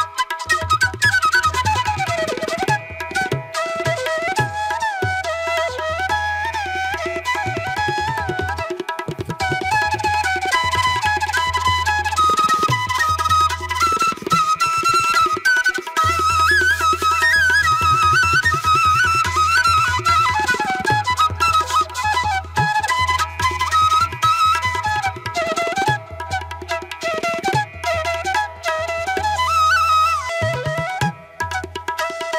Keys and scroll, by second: 0.1 space, 4.0 space, 6.2 ctrl+=, 6.7 ctrl+-, 7.3 ctrl+-, 7.5 space, 7.8 ctrl+-, 8.1 ], 8.8 ], 16.1 space, 16.4 ctrl+-, 16.7 ], 17.5 ], 17.9 ctrl+-, 21.2 ctrl+=, 21.8 ctrl+=.